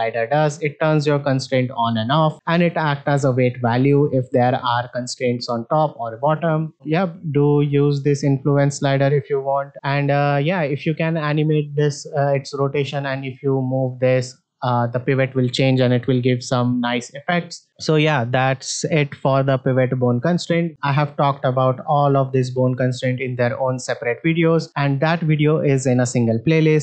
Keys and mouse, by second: 2.3-4.1 drag, 7.6-8.6 drag, 9.7 middle click, 10.9-11.5 drag, 13.5-14.2 drag, 20.7-26.8 drag.